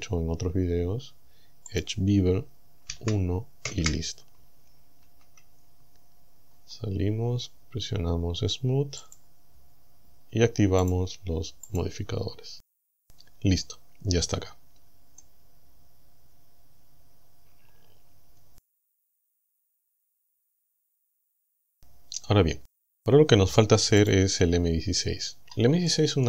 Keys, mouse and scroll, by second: 1.7 click, 2.9 KP_1, 3.7 KP_Enter, 5.1 Tab, 6.5-7.3 scroll up 4, 7.6-8.0 scroll up 1, 9.0 click, 9.7 scroll down 1, 10.9 click, 11.7 click, 12.4-12.9 scroll up 2, 14.4-14.8 scroll down 2, 15.2-20.2 middle drag, 21.1 KP_1, 24.1 click, 24.7-25.4 scroll down 2, 25.4-25.8 scroll up 2, 25.9 shift+middle click.